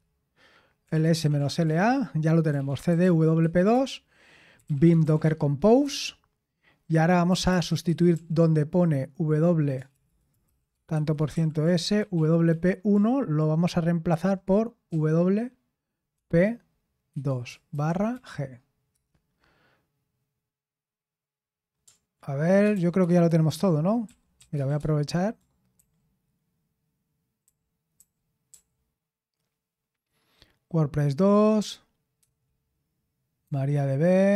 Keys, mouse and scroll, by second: 0.0-5.8 typing, 7.5-8.1 typing, 9.5-12.6 typing, 13.8-14.9 typing, 15.9-18.9 typing, 22.7 typing, 23.8-25.2 typing, 25.8 ctrl+u, 27.4 ctrl+u, 28.0 ctrl+u, 28.5 ctrl+u, 32.2 ctrl+d, 33.4 ctrl+d.